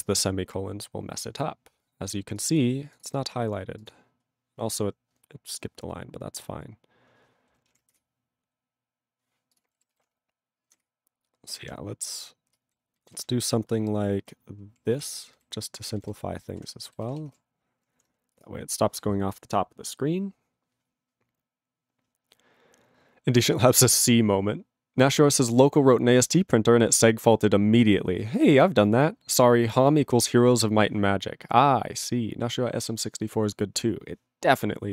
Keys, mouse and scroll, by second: 9.5 click, 9.6 click, 10.8 ctrl+Return, 11.6 ctrl+n, 12.0 ctrl+p, 12.4 ctrl+space, 12.7 ctrl+n, 13.1 ctrl+g, 13.2 ctrl+n, 13.7 ctrl+n, 14.6 ctrl+p, 14.9 ctrl+n, 15.7 ctrl+space, 15.8 ctrl+n, 16.6 ctrl+w, 17.0 ctrl+s.